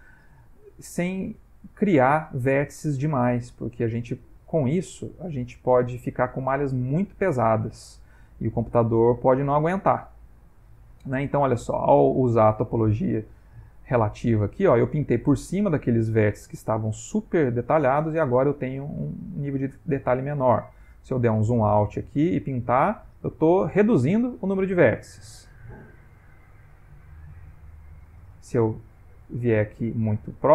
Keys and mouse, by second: 0.6 ctrl+middle click, 1.4 click, 3.5 ctrl+middle click, 5.3 ctrl+middle click, 5.9 f, 7.0 click, 10.9 middle click, 11.7 click, 12.9 middle click, 13.5 click, 18.2 Tab, 18.9 middle click, 20.1 Tab, 20.6 ctrl+middle click, 21.1 ctrl+middle click, 21.8 click, 24.0 Tab, 24.7 Tab, 25.0 ctrl+middle click, 25.5 ctrl+middle click, 26.1 click, 27.4 ctrl+middle click, 29.6 click.